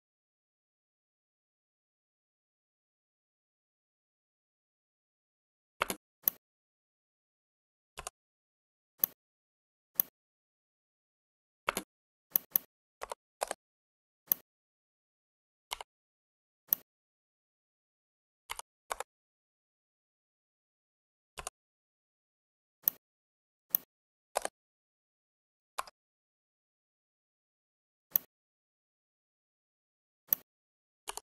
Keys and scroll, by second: 5.9 space, 11.7 space, 18.4 5, 18.7 Return, 25.6 Escape, 31.0 w.